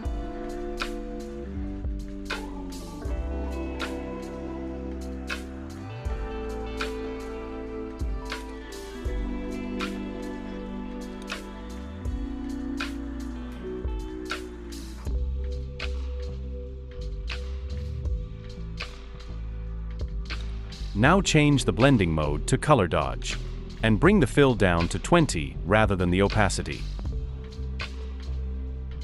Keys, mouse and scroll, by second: 3.1-4.2 typing, 6.4-7.5 typing.